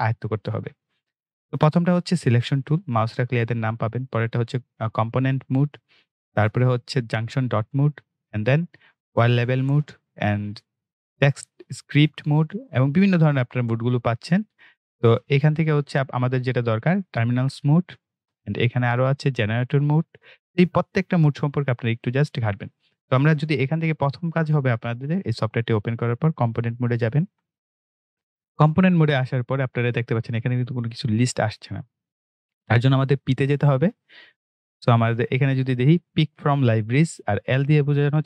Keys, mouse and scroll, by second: 26.9 click.